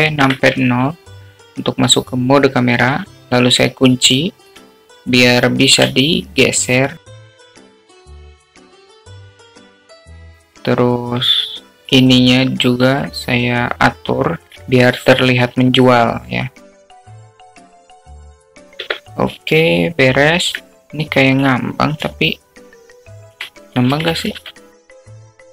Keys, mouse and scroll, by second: 2.3 ctrl+alt+KP_0, 4.9 q, 7.0-7.8 shift+middle drag, 8.1-8.7 middle drag, 9.0 alt+shift+middle click, 10.5 q, 12.6-14.0 drag, 14.2 alt+middle drag, 14.8 click, 15.2-16.2 alt+middle drag, 16.3 alt+middle click, 16.8 click, 18.0 g, 20.7-21.4 alt+middle drag, 21.9-23.5 alt+middle drag, 24.2-25.0 shift+middle drag, 25.2 g.